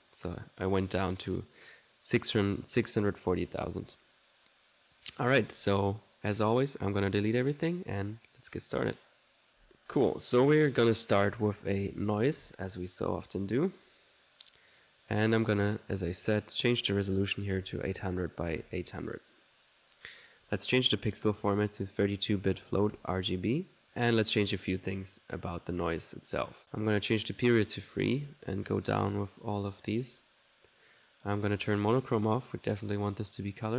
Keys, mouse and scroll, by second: 1.4-3.7 middle drag, 3.9 click, 6.1 middle click, 6.4 click, 8.2 click, 9.5 right click, 10.0 Delete, 10.6 middle click, 11.4 click, 11.7-13.0 typing, 13.0 click, 13.5 click, 13.8 middle click, 14.9 click, 16.1 click, 16.7 click, 18.3 click, 20.9 click, 23.0-28.7 drag, 28.7 right click, 29.0 click, 29.8 click, 30.1 click, 31.9 click, 32.8 click.